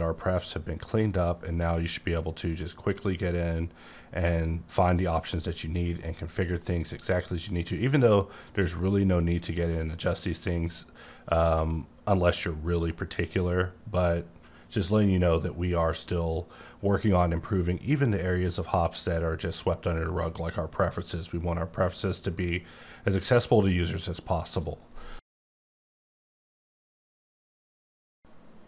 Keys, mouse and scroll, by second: 1.6 click, 2.2 click, 7.0 click, 7.8 click, 8.4 click, 24.4 click.